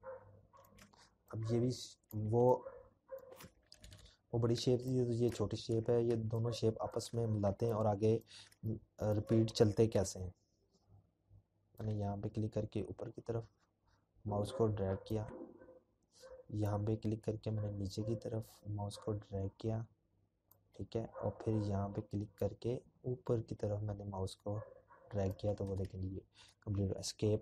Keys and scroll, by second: 0.8-1.3 ctrl+-, 1.4-4.1 ctrl+-, 4.8 ctrl+-, 4.9 ctrl+-, 5.7 p, 23.2-25.0 Escape.